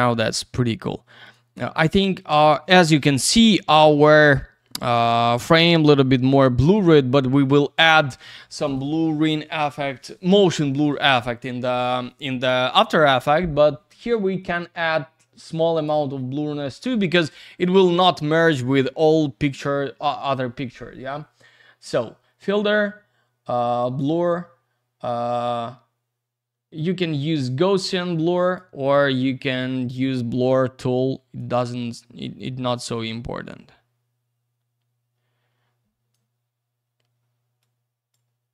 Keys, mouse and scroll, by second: 1.2 click, 1.3 click, 3.2 click, 15.6 click, 15.8 click, 23.8 click, 24.0 click, 26.7 click, 30.8 click, 32.2 click, 37.6 click.